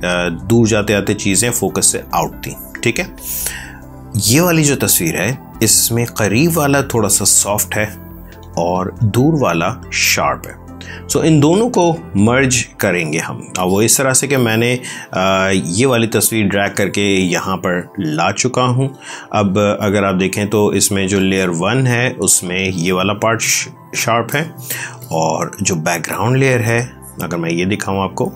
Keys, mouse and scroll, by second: 4.1 click, 4.9 space, 5.5 click, 13.1 space, 13.5 click, 13.6 space, 14.3 ctrl+click, 18.8 space, 19.1 click, 19.3 space, 20.2 ctrl+click, 22.5 space, 23.3 click, 23.4 space, 23.8 click, 23.9 space, 25.0 space, 26.1 click.